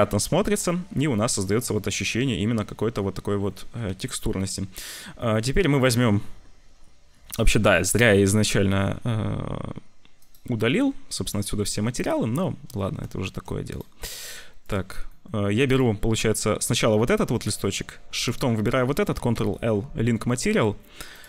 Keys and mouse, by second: 3.9 ctrl+s, 8.4 z, 11.4 click, 12.5 z, 13.1 shift+click, 13.3 z, 13.6 click, 14.6 click, 15.2 click, 15.6 click, 18.2 shift+click, 19.3 ctrl+l.